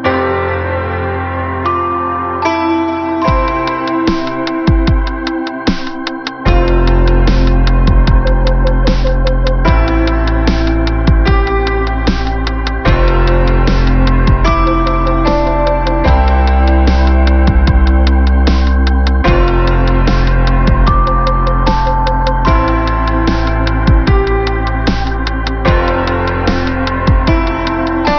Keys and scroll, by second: 0.2 ctrl+=, 24.6 shift+e, 25.2 y, 25.5 e, 26.4 Return.